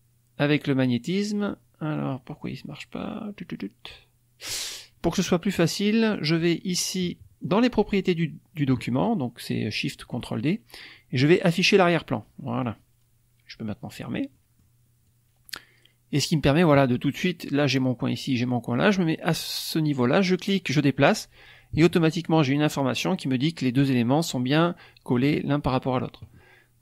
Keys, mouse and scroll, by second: 5.9 click, 7.4 click, 11.5 click, 13.8 click, 14.3 middle click, 15.0-16.8 drag, 20.1-22.4 drag.